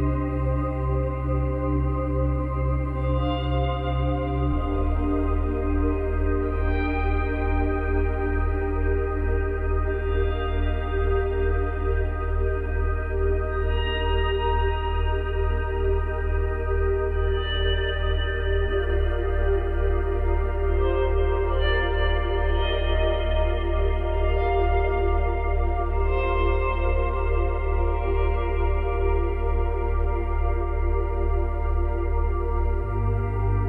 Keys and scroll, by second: 12.8 space, 14.8 space.